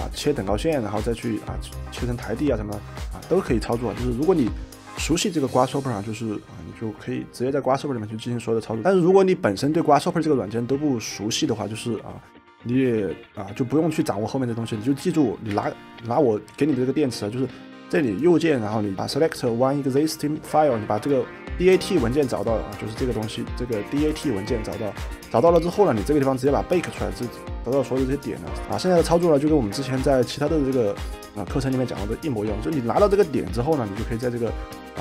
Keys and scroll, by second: 15.5 Delete.